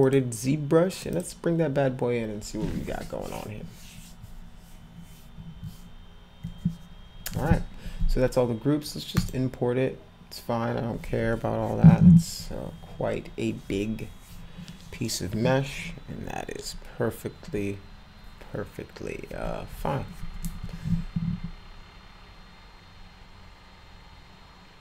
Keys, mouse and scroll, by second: 0.0 click, 0.9 click, 1.1 click, 9.2 click.